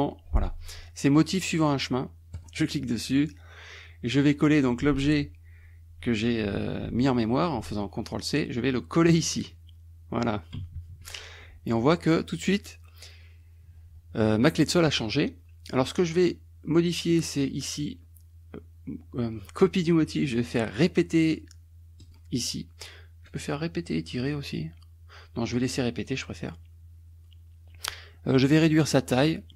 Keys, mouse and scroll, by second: 0.0-0.2 typing, 2.4 click, 9.1 click, 10.8 KP_Subtract, 17.1 click, 22.1 click, 23.3 click, 24.2 click, 25.4 click, 26.0 click, 28.2 middle click, 29.2 click.